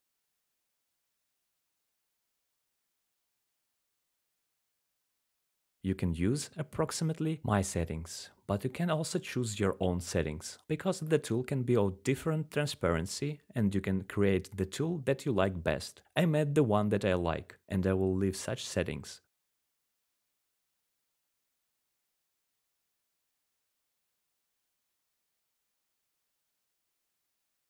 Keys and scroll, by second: 0.0-0.4 typing, 10.5 Return, 13.1 1, 13.3 Return, 16.4 1, 19.1 1.